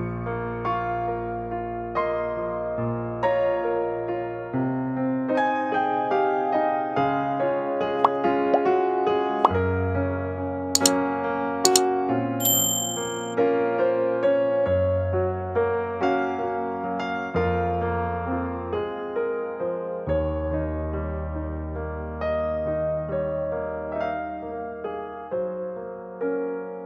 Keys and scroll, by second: 0.7 m, 4.7-7.3 typing, 10.8 typing.